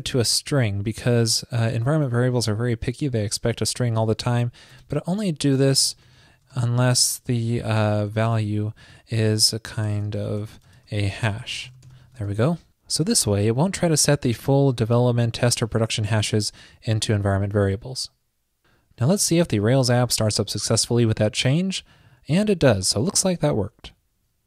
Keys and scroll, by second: 12.3 super+s.